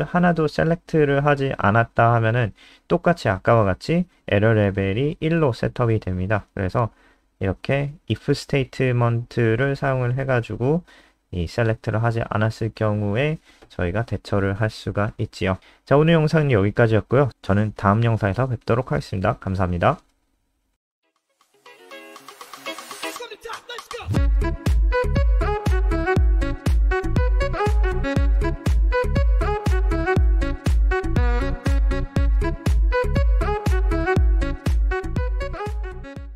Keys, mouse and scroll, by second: 0.2 click, 1.8 ctrl+v, 4.0 click, 4.2 click, 6.2 ctrl+s, 6.4 F5, 9.7 click.